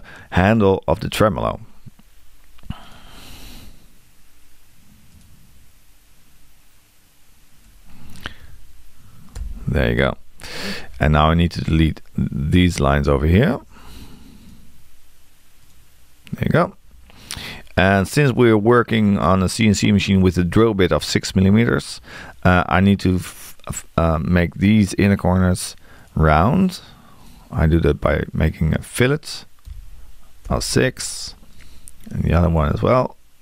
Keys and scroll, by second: 8.4 8, 13.5 t, 29.7 6.